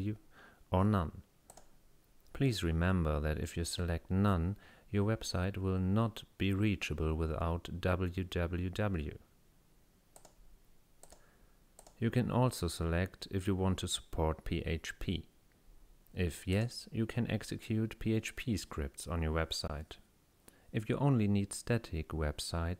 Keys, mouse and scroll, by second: 1.5 click, 10.2 click, 11.1 click, 11.8 click, 16.6 click.